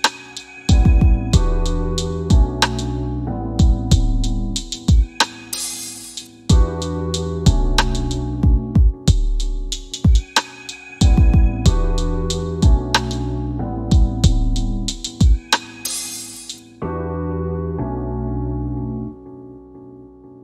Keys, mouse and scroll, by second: 0.0-0.4 typing, 0.6 KP_Enter, 1.5 scroll up 1, 1.8 w, 3.2 w, 3.8 click, 4.4 w, 5.0 w, 5.7 scroll up 1, 7.1 click, 7.5 scroll down 1, 7.9 alt+middle click, 10.5 F4, 11.0 scroll up 1, 11.7 alt+middle click, 13.2 click, 14.1 middle click, 15.5 click, 16.8 middle click, 19.2 e, 20.1 click.